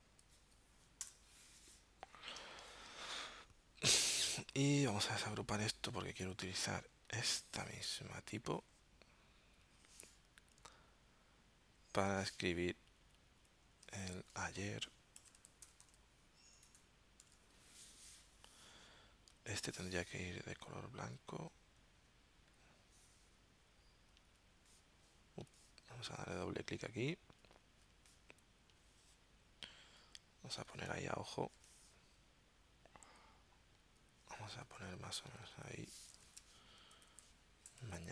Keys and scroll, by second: 1.1 BackSpace, 2.3 space, 5.5 shift+super+g, 15.1-17.2 typing, 34.6 super+z, 36.3 super+a, 37.1-38.1 typing.